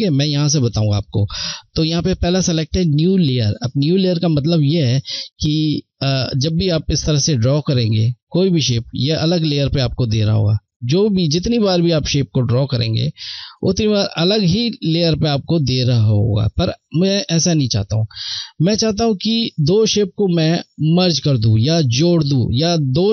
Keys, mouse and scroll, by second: 3.9 click, 6.4 click, 10.3 click, 16.2 ctrl+Num_Lock, 16.2 click, 17.0 ctrl+z.